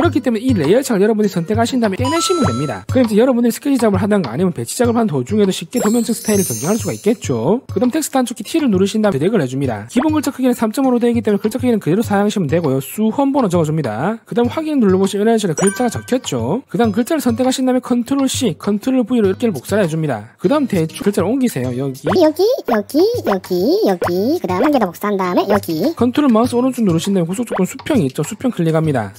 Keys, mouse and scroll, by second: 1.7 click, 2.9 click, 3.9 click, 4.9 click, 6.0 click, 8.8 click, 13.4 t, 15.4 click, 17.8 click, 19.5 ctrl+v, 19.8 ctrl+v, 20.2 ctrl+v, 20.4 click, 21.5 click, 22.6 click, 23.2 click, 24.0 click, 24.8 click, 25.0 click, 25.2 ctrl+c, 25.4 ctrl+v, 25.6 click, 25.8 click, 27.4 ctrl+right click, 29.1 click.